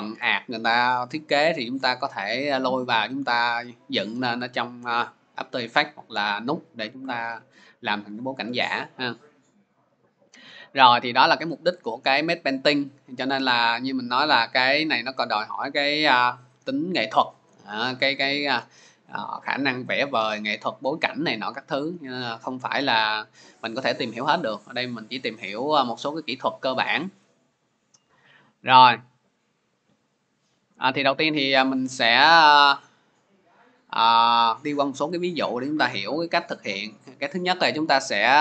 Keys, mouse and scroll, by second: 8.6 click, 13.6 click, 15.1 click, 25.3 click, 26.3 click, 26.4 click, 28.1 click, 29.3 click.